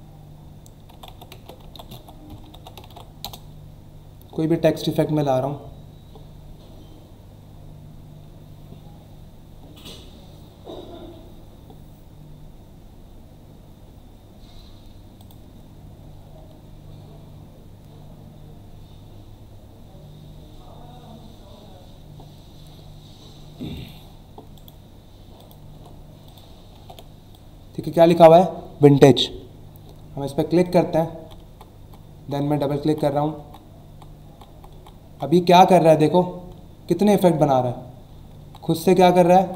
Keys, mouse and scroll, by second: 0.8-3.0 typing, 3.2 Return, 6.3 scroll down 1, 8.0 scroll down 1, 9.7-10.4 scroll down 2, 12.3 scroll down 1, 12.8 scroll down 1, 15.2 click, 16.2-16.6 scroll down 1, 17.3 scroll down 1, 17.9 scroll down 1, 18.7 scroll down 1, 20.6 scroll down 1, 21.6 scroll down 1, 22.5 scroll down 1, 23.7 click, 24.5 right click, 25.4 click, 25.7 Tab, 26.2 click, 26.7 ctrl+v, 27.3 click, 30.2 click, 30.6 click, 36.6 alt+scroll down 1.